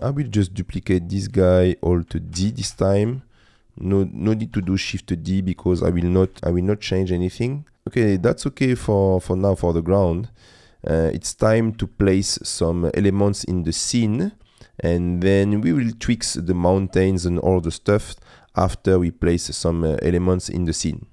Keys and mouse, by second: 2.4 alt+d, 2.6 g, 3.0 shift+z, 4.5 r, 5.5 z, 6.4 alt+d, 6.4 g, 6.4 shift+z, 8.7 middle click, 10.7 middle click, 11.9 shift+middle click, 14.6 middle click, 18.4 middle click, 19.1 middle click.